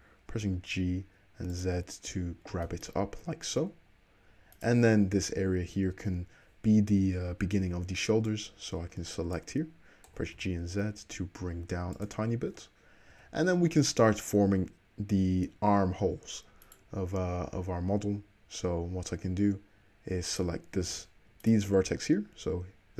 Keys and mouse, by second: 1.7 `, 3.2 Tab, 3.6 Tab, 4.5 click, 4.6-8.4 middle drag, 6.9 v, 8.4-12.1 drag, 10.1 g, 12.1-16.6 middle drag, 16.6 click, 16.8-20.3 middle drag, 20.3 click, 20.4-21.4 middle drag, 21.4 click, 21.5-22.9 middle drag.